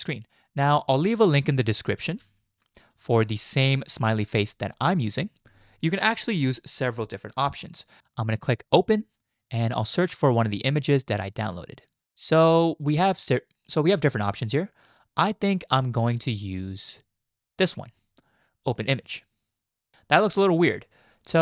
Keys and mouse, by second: 0.7 click, 2.0 z, 3.1 shift+click, 8.7 click.